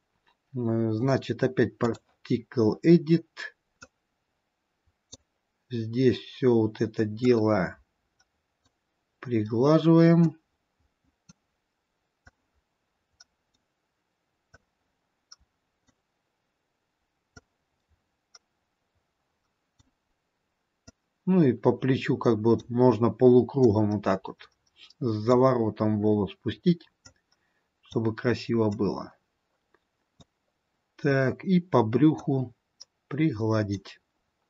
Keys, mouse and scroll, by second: 4.0 click, 7.4 click, 10.5 click, 14.8 click, 17.6 click, 21.1 click, 23.9 click, 27.2 click, 29.0 click, 32.4 click.